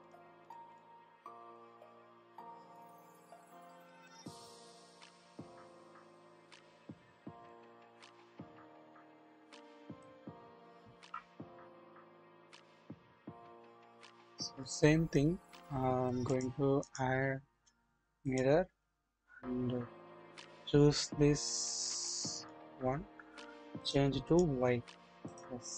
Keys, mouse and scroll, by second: 0.0 double click, 1.5-4.4 drag, 5.0 shift+scroll up 1, 5.3 shift+middle click, 5.4-6.5 shift+drag, 6.6-7.5 scroll up 1, 7.5 click, 8.3 middle click, 8.3-10.0 drag, 10.3 scroll up 1, 10.4-10.9 scroll down 2, 11.1-11.6 shift+middle drag, 11.8 scroll down 1, 12.3-13.8 middle drag, 13.9-16.8 scroll up 1, 18.3 click, 20.4 click, 23.8 click, 24.2 double click, 24.9-25.7 scroll down 1.